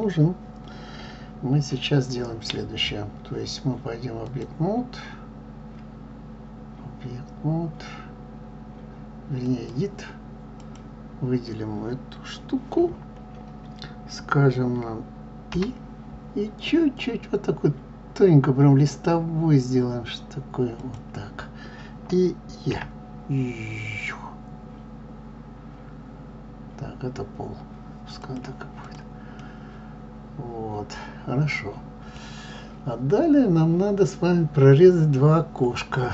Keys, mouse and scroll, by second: 10.7 click, 28.8 click, 29.3-36.1 middle drag.